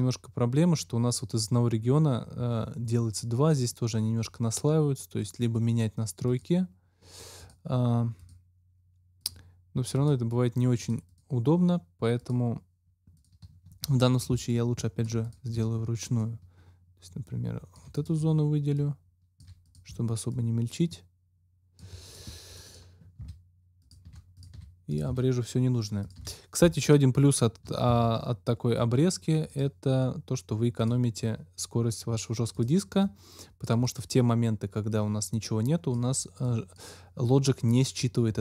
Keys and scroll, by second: 23.1 Delete, 27.8 ctrl+x.